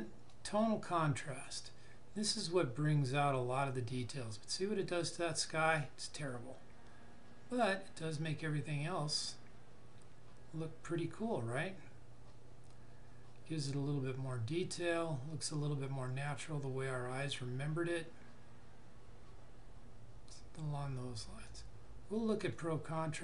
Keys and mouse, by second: 21.4 click.